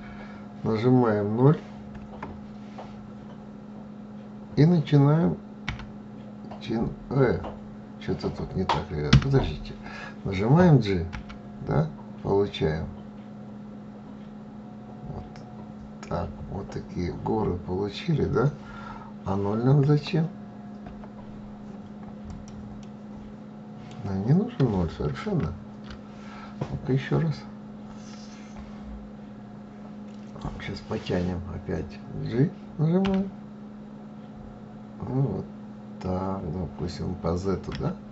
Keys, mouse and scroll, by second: 10.6 g, 22.3-24.7 middle drag, 24.7 ctrl+z, 32.5 g.